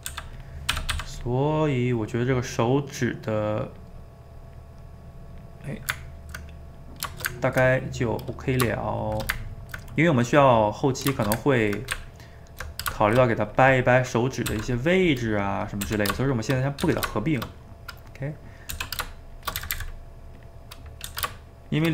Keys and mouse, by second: 0.1 f, 0.7 g, 0.9 f, 1.4-3.5 middle drag, 3.5 click, 4.0 middle click, 4.3-5.6 drag, 5.6-9.1 middle drag, 9.1 shift+right click, 9.3-11.9 ctrl+middle drag, 11.9 Tab, 13.0 shift+middle click, 13.5 click, 13.9 middle click, 14.6 r, 15.3 middle click, 15.9 r, 16.5 shift+middle click, 16.8 g, 17.5-18.7 middle drag, 18.7 r, 19.6 a, 19.8 a, 20.0 middle click, 20.4 click, 20.5 middle click, 21.1 g.